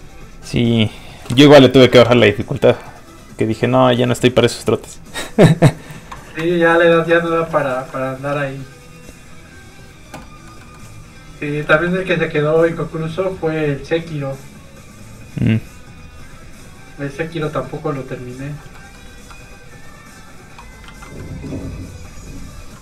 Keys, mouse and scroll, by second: 1.5 middle click, 1.6 middle click, 2.0 ctrl+s, 6.4 shift+s, 7.7 shift+middle click, 9.5 click, 10.2 middle click, 11.7 f, 11.9 click, 18.7 middle click, 19.1 ctrl+z, 19.8 click, 19.9 click, 20.8 ctrl+z, 21.2 middle click, 21.3 middle click, 22.0 click.